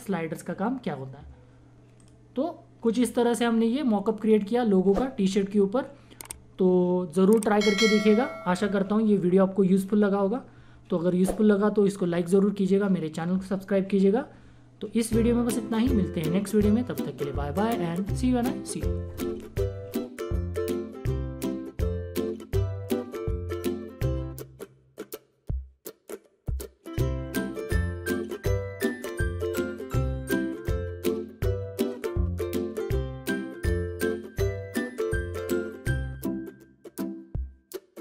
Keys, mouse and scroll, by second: 2.0 click, 4.2 typing.